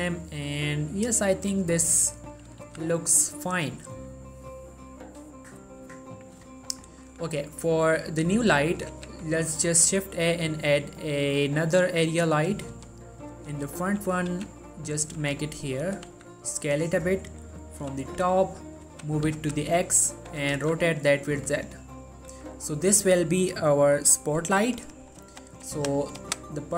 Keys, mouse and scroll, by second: 2.8 z, 8.4 click, 9.1 shift+a, 11.8 click, 12.9 3, 13.5 g, 14.1 click, 14.5 r, 15.1 click, 15.2 g, 15.6 click, 16.3 s, 16.6 click, 17.4 middle click, 18.0 7, 19.0-20.7 typing, 20.1 click, 21.5 click, 21.9 middle click, 22.4 g, 22.9 click.